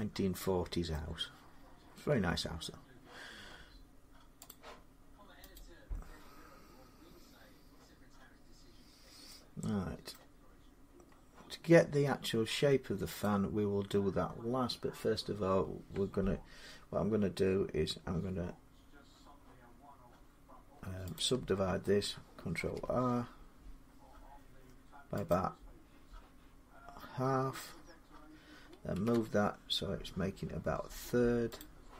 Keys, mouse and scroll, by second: 0.7 middle click, 1.9 Tab, 4.3 click, 5.3 click, 9.9 middle click, 12.3 middle click, 13.0-18.1 drag, 21.0-25.1 drag, 22.3 ctrl+r, 28.7 typing, 31.4 click.